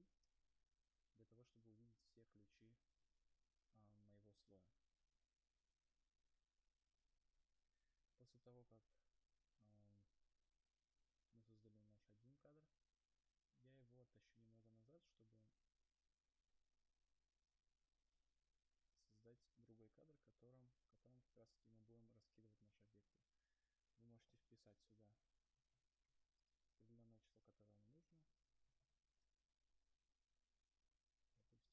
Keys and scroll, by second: 3.1 u, 8.3 F9, 29.6 Return.